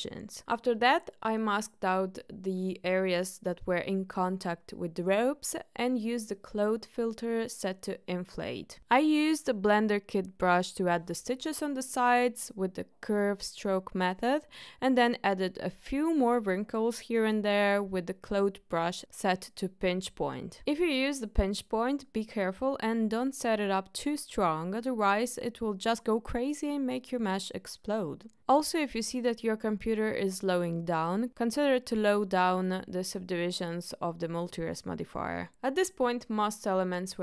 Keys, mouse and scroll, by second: 0.2 middle click, 0.7 KP_1, 1.6 drag, 2.1 shift+click, 2.4 ctrl+click, 2.9 ctrl+click, 3.7 ctrl+click, 4.4 ctrl+click, 5.0 ctrl+click, 5.7 KP_1, 6.3 middle click, 7.2 middle click, 7.4-8.4 drag, 9.2 click, 10.7 ctrl+click, 11.9 ctrl+click, 12.7 ctrl+click, 14.7-16.5 drag, 19.6-23.8 drag, 24.4 middle click, 24.9 shift+middle click, 25.7-29.2 drag, 29.9 shift+middle click, 30.4 middle click, 31.2-34.4 drag, 35.4 click.